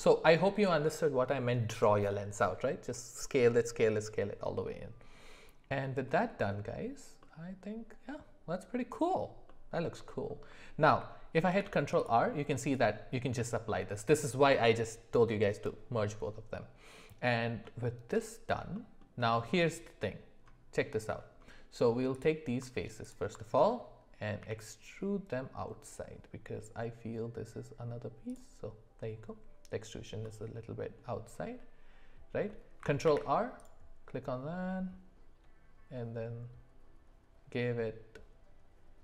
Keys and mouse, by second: 7.2-9.2 middle drag, 9.5 middle click, 10.1 shift+middle click, 11.5 ctrl+r, 18.1 middle click, 18.7 shift+middle click, 22.1 click, 23.0 alt+click, 24.4 e, 30.2 middle click, 33.0 ctrl+r.